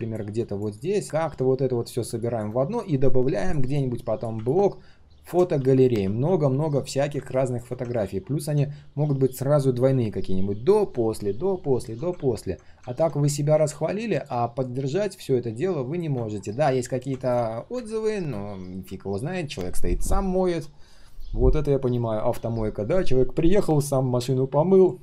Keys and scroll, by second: 5.5 ctrl+d, 5.9 ctrl+d, 6.1 ctrl+d.